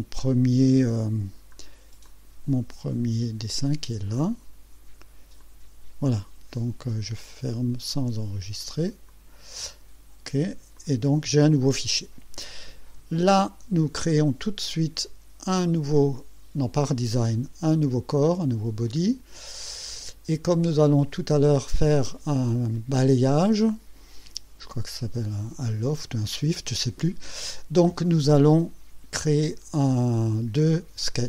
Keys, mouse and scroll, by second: 1.3 scroll down 2, 2.0 click, 3.6 click, 5.4 click, 9.1 click, 10.7 click, 17.7 click.